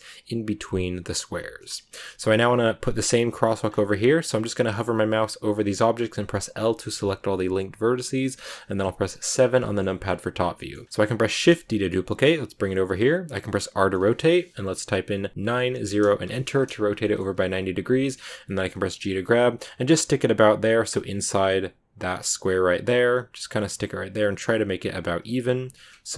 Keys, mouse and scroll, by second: 1.2 scroll down 2, 2.3-3.6 scroll down 6, 3.6 scroll up 3, 4.8 l, 5.4 l, 8.2 KP_7, 9.0 click, 9.3 scroll down 3, 9.5 shift+middle click, 10.0-10.5 scroll up 1, 10.5 shift+middle click, 11.3 shift+d, 13.4 r, 16.9-18.4 shift+middle drag, 18.4 g, 25.1 g, 25.9 Tab, 25.9 scroll down 3.